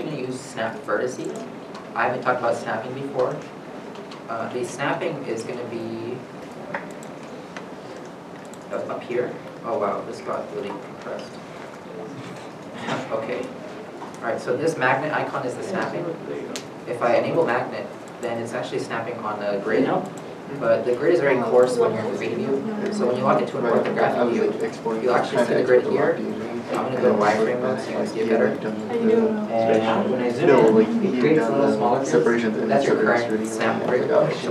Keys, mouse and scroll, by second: 18.7-19.2 scroll down 1, 19.2-21.2 scroll down 1, 23.1 g, 23.1 right click, 24.0 KP_7, 24.9-26.4 shift+scroll up 1, 27.2 z, 27.8 shift+middle click, 29.7 shift+middle click, 29.7-31.9 scroll up 1, 34.2 scroll, 34.3 g.